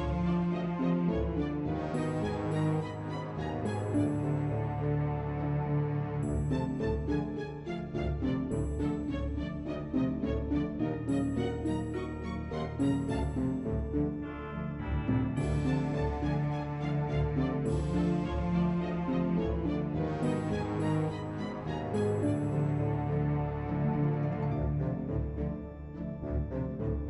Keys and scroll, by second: 5.3-6.2 typing.